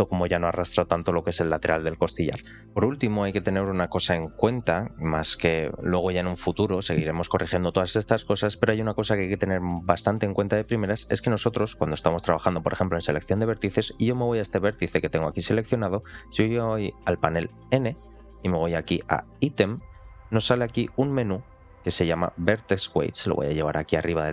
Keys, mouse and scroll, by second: 3.7-4.6 scroll up 3, 4.6 shift+middle click, 10.3 scroll up 2, 10.7 shift+middle click, 13.0 click, 14.4 ctrl+click, 17.5 n, 19.2 click, 20.1-22.2 scroll down 4, 23.0-24.3 drag.